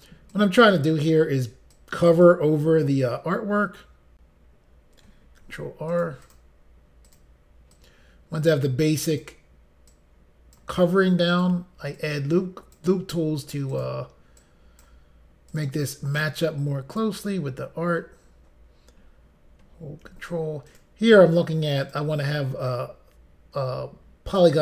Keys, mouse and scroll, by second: 0.4 click, 1.7 click, 5.4 ctrl+r, 5.9 click, 6.2 click, 6.3 double click, 7.1 double click, 7.7 double click, 9.1 click, 10.0 click, 11.3 click, 12.0 click, 13.7 click, 13.8 click, 14.4 click, 15.5 click, 16.3 click, 20.1 ctrl+r, 20.7 click, 21.9 click.